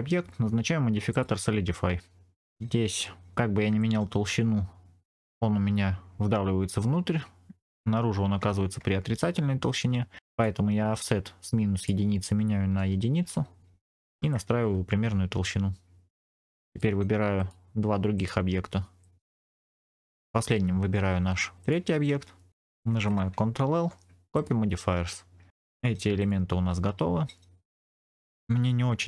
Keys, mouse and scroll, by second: 1.0-2.4 drag, 2.4 shift+middle click, 2.4 scroll up 2, 3.7-10.3 drag, 11.7-13.1 drag, 14.2-16.3 shift+drag, 16.3 middle click, 16.3 scroll down 3, 16.6 click, 17.3 click, 18.1 shift+click, 18.9 shift+click, 19.5 shift+click, 21.5 shift+click, 23.5 ctrl+l, 24.9-25.5 scroll up 3, 25.5 middle click, 25.5-26.1 scroll down 2, 26.1 click, 26.1 scroll down 1, 27.1-27.9 scroll down 2, 27.9 middle click, 27.9-28.2 scroll down 1, 28.2-29.0 scroll up 2.